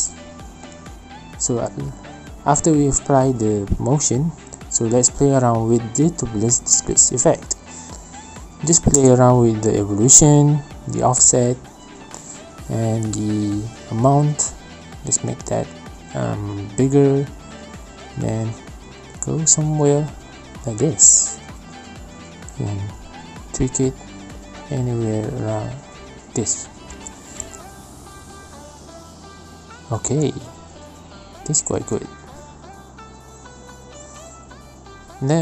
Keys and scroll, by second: 3.6 space, 30.6 space, 32.1 space, 34.9 space, 35.2 space.